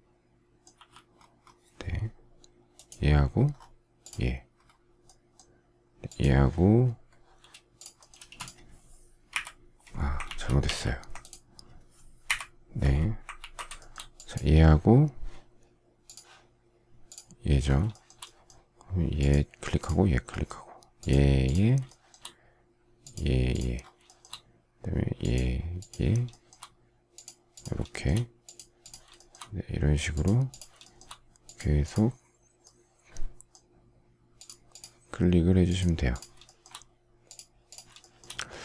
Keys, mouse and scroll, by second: 0.7 k, 8.2 space, 9.3 Delete, 10.3 ctrl+z, 12.2 Delete, 13.3 ctrl+z, 13.7 shift+middle click, 17.9 shift+middle click, 21.9 shift+middle click, 24.0 shift+middle click, 26.3 shift+middle click, 27.9 shift+middle click, 29.1 shift+middle click, 29.3 shift+double middle click, 30.8 shift+middle click, 36.6 shift+middle click, 38.0 shift+middle click, 38.2 shift+double middle click.